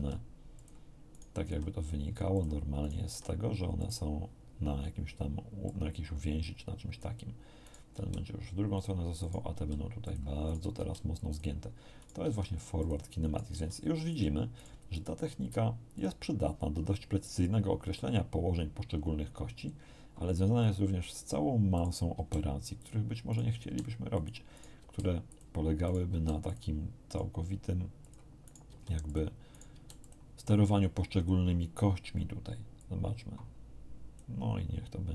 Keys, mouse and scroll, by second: 0.5 click, 1.1 right click, 1.4 r, 2.3 click, 2.8 right click, 3.1 r, 3.7 click, 5.6-7.1 drag, 7.6 right click, 7.9 r, 8.7 click, 9.2 right click, 9.5 r, 10.0 click, 10.5 right click, 10.7 r, 11.1 click, 11.9 right click, 12.2 r, 12.8 click, 13.2 right click, 13.5 r, 14.1 click, 14.5-15.2 right drag, 15.3 r, 15.9 click, 19.5 click, 21.7 right click, 22.1 r, 22.7 click, 23.3 right click, 23.5 r, 24.1 click, 24.5 right click, 24.7 r, 25.3 click, 25.8 right click, 26.1 r, 26.5 click, 27.1 right click, 28.0 click, 28.4 right click, 28.7 r, 29.1 click, 29.5 right click, 29.7 r, 30.0 click, 32.7-34.3 drag.